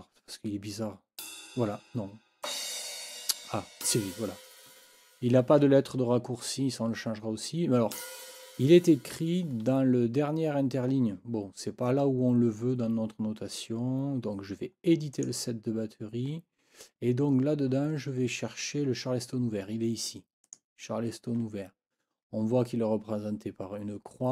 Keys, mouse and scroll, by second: 1.2 click, 2.4 click, 3.8 click, 7.9 click, 15.1 click, 17.7-18.4 scroll down 2, 20.4 click.